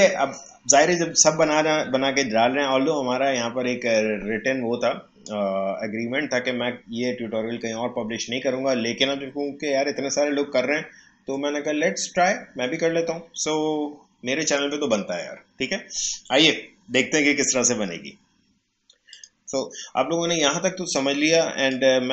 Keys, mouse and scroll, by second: 1.2 scroll down 1, 2.4 scroll up 1, 19.2 click, 21.7-22.1 drag.